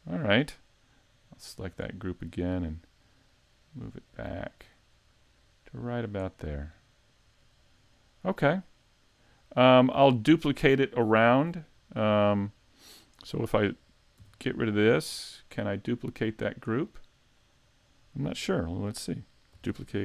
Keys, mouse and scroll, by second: 1.6 click, 3.0 click, 6.4 scroll down 1, 6.8 middle click, 12.5 middle click, 13.2 right click, 14.2 x, 16.4 click, 17.6 middle click, 19.7 shift+d.